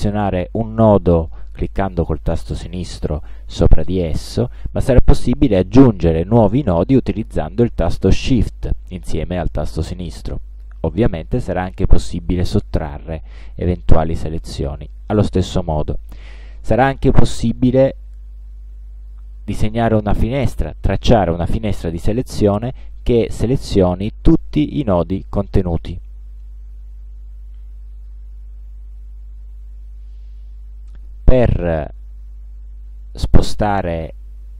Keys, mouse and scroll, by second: 1.2 click, 2.7 click, 4.2 click, 6.8 shift+click, 8.3 shift+click, 9.9 shift+click, 11.5 shift+click, 13.1 shift+click, 14.5 shift+click, 18.1-19.3 drag, 24.5 click, 27.3 click.